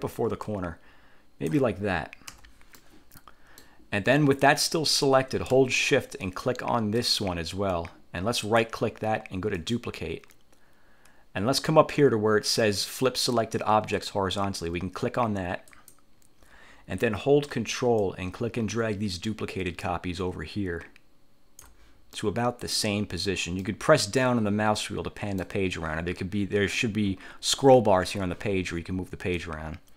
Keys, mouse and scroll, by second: 0.6-1.8 ctrl+drag, 2.5 1, 2.9-3.9 drag, 7.1 shift+click, 8.6 click, 9.7 click, 15.8 click, 18.1-21.9 ctrl+drag, 22.3 middle click, 23.7 middle click, 24.3 scroll up 1, 29.5-29.9 ctrl+drag.